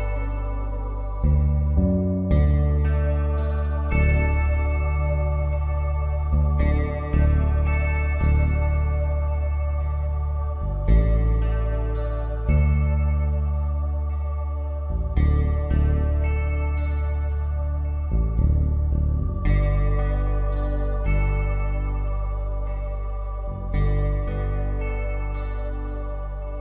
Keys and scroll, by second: 5.3 i, 7.0 alt+shift+Delete, 7.6 v, 14.3 i, 17.3 alt+shift+Delete, 17.7 v, 24.2 b.